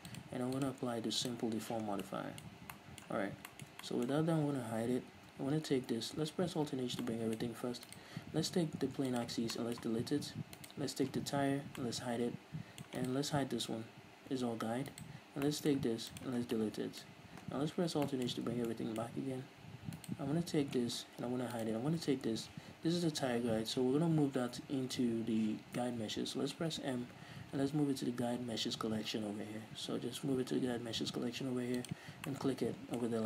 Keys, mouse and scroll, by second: 2.2 scroll down 2, 2.3-8.2 middle drag, 2.8 scroll up 2, 3.5 scroll down 2, 5.1 h, 6.9 alt+h, 8.2 right click, 9.0 x, 9.9-10.9 middle drag, 10.9 right click, 11.9 h, 12.1-13.3 middle drag, 13.3 right click, 14.1 h, 14.3-14.7 scroll up 1, 15.2 right click, 15.8-20.3 middle drag, 16.3 x, 16.8 scroll down 2, 18.1 alt+h, 18.6-19.0 scroll up 2, 20.3-21.5 right drag, 21.5 h, 21.9-24.5 right drag, 24.5-25.2 scroll down 1, 25.2 scroll up 1, 26.9 m, 32.6-33.2 middle drag.